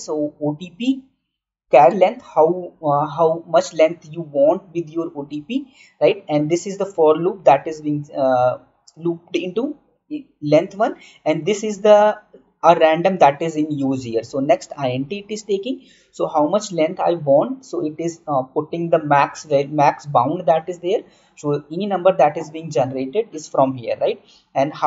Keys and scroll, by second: 9.3-13.5 typing, 15.0-16.7 typing.